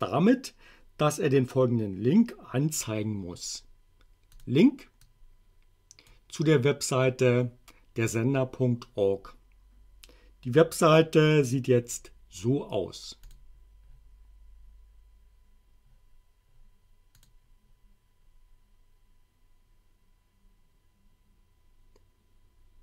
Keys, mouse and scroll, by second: 4.4 click, 5.1-6.3 drag, 13.2 click, 17.2 click.